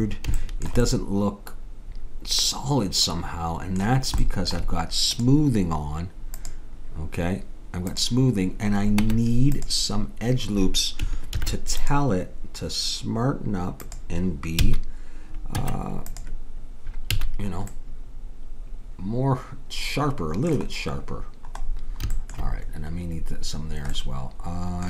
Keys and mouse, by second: 1.2-2.6 middle drag, 5.1-9.1 drag, 9.1 Tab, 11.4 ctrl+r, 14.6 a, 15.6 Tab, 17.1 a, 21.2-24.8 middle drag.